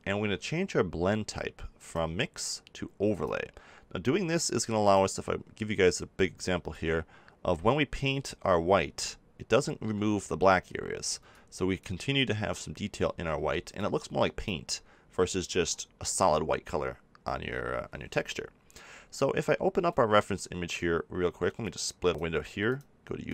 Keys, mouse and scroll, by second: 4.1 f, 4.8-7.6 drag, 10.9 ctrl+z, 11.2-13.2 drag, 13.3 ctrl+z, 13.7-14.9 drag, 15.4 ctrl+z, 21.5-23.3 drag.